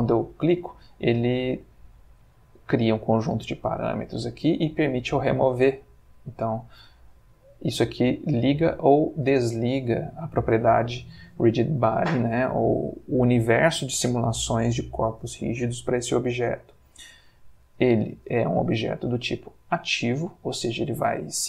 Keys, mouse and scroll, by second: 4.6 click, 6.1 click, 7.0 click, 7.8 click, 8.3 click, 9.2 click, 17.8-18.4 drag, 19.1 click.